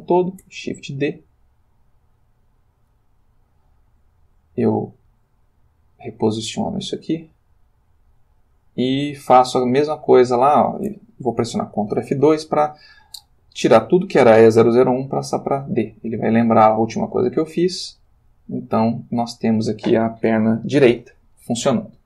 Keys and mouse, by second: 0.4 shift+d, 2.8 click, 4.4 click, 5.1 g, 6.4 click, 6.9 click, 7.1 g, 8.1 click, 8.7 click, 9.4 shift+click, 10.2 shift+click, 11.9 ctrl+F2, 15.8 click, 17.2 click, 18.0 click, 19.4 click.